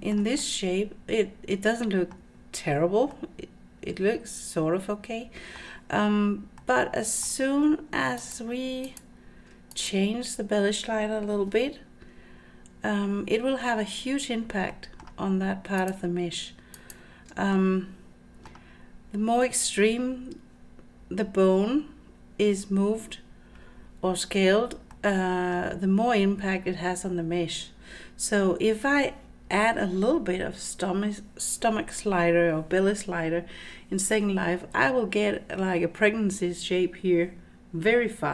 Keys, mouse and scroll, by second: 0.0 shift+middle click, 0.4-2.2 middle drag, 2.4-3.0 scroll down 4, 3.2-5.6 middle drag, 6.3 scroll up 3, 6.6-7.3 middle drag, 8.2 ctrl+click, 8.9 ctrl+click, 9.8 click, 11.5 Tab, 14.8 middle click, 15.8 ctrl+click, 16.8 ctrl+click, 17.5-18.5 middle drag, 25.0 middle click.